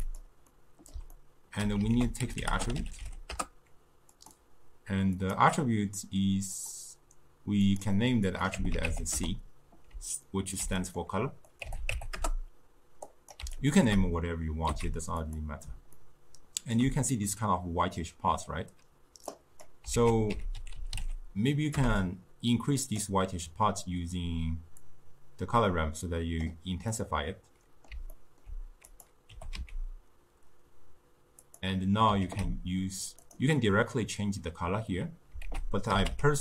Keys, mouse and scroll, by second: 0.5-1.9 middle drag, 1.9 ctrl+a, 2.6 t, 5.2 click, 6.6 click, 7.7-10.3 drag, 10.3-11.5 ctrl+middle drag, 11.5-13.8 drag, 14.7 z, 16.0-19.0 ctrl+middle drag, 19.4 click, 20.0 ctrl+a, 24.8-27.0 drag, 27.0-28.9 middle drag, 28.9 click, 29.4 g, 32.3 ctrl+a, 35.5 ctrl+a.